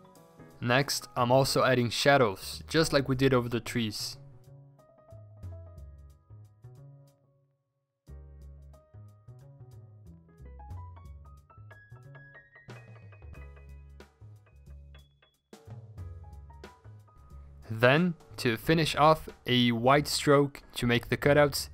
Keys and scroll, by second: 0.7 ctrl+t, 0.9 Escape, 2.2 ctrl+t, 3.7 b, 4.6 e, 5.2 b, 7.0 e, 9.6 ctrl+i, 10.4 Return, 10.5-11.4 typing, 12.4 ctrl+z, 12.9-17.4 typing, 15.0 ctrl+t, 19.6 ctrl+g, 19.7 typing, 21.1 Escape.